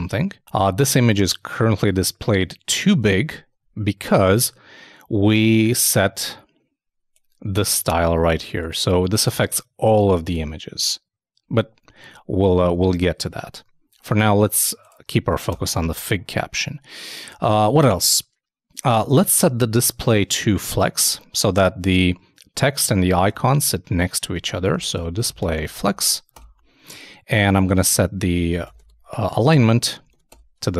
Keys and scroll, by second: 2.9 super+Tab, 19.3 super+Tab, 23.3 super+Tab, 24.3 super+d, 30.6 super+Return, 30.7 super+s.